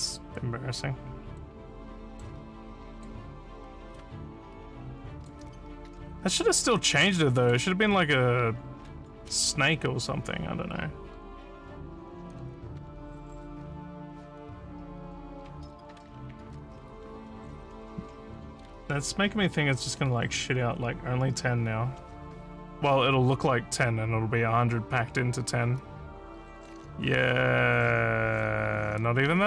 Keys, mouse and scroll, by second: 0.4-1.4 drag, 2.0 middle click, 2.7 click, 4.0-5.3 drag, 7.4 click, 9.0 click, 27.3 w, 27.9 w, 28.8 d.